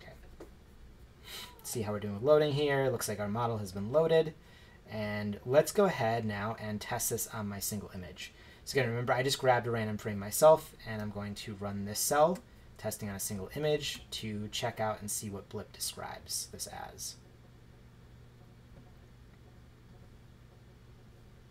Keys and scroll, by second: 13.8 shift+Return.